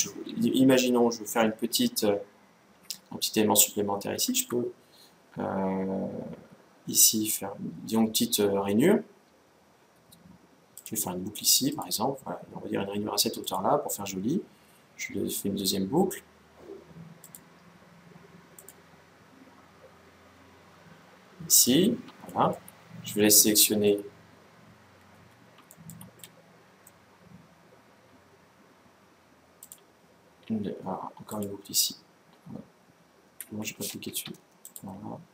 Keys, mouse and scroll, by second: 2.6 KP_1, 4.2 Tab, 10.5-12.4 drag, 13.9-15.9 middle drag, 16.9-18.8 drag, 22.1-25.0 middle drag, 25.0-25.5 scroll up 1, 25.5-27.9 middle drag, 29.3-31.1 drag, 31.2 click, 34.4-35.3 drag.